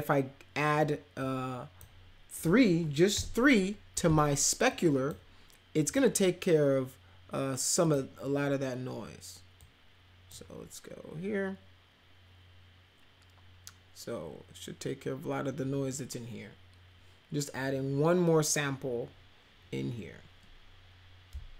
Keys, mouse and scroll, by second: 1.2 click, 3.1 3, 4.7 click, 5.8 click, 7.8 click, 9.6-10.3 drag.